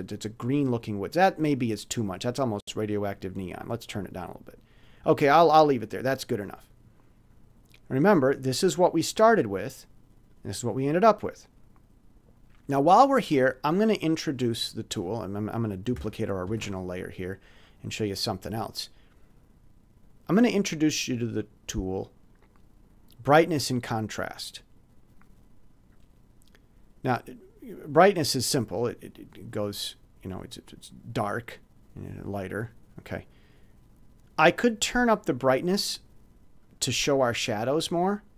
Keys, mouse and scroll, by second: 1.9 click, 5.6 click, 7.9-8.2 scroll up 2, 8.5 click, 8.6 scroll up 2, 10.2 click, 13.7 click, 15.0 click, 16.4 ctrl+shift+d, 17.5-18.5 drag, 21.3 click, 24.3 click, 28.4-36.6 drag.